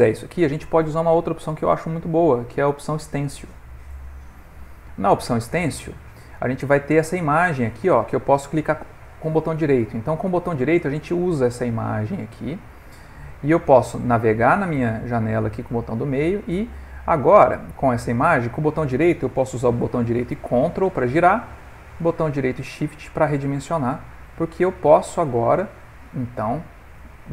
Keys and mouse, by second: 1.2 click, 7.1 right click, 8.9 right click, 14.6-15.4 middle click, 15.2 middle click, 15.9 right click, 17.4 right click, 19.0 right click, 20.3 ctrl+right click, 20.5 ctrl+right click, 22.4 shift+right click.